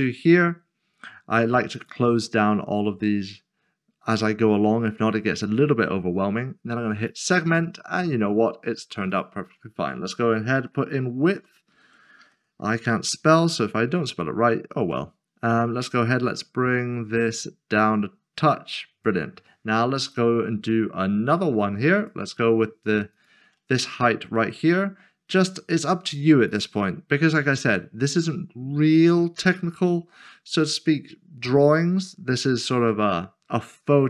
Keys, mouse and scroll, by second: 1.7 shift+click, 1.9 click, 7.1 click, 11.2-12.3 typing, 14.0 click, 15.3 scroll down 1, 16.3 click, 20.0 click, 23.1 shift+click, 26.5 click, 29.0 click.